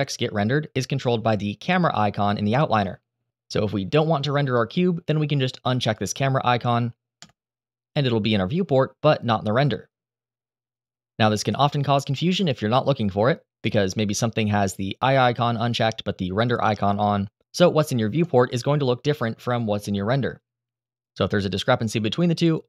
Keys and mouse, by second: 5.5 click, 10.7 F12, 14.4 click, 15.4 click, 20.9 F12.